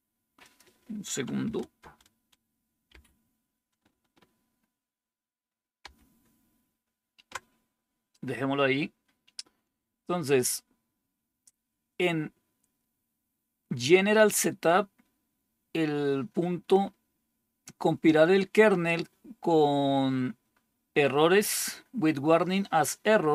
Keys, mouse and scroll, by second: 1.7 ctrl++, 2.8 ctrl++, 5.7 +.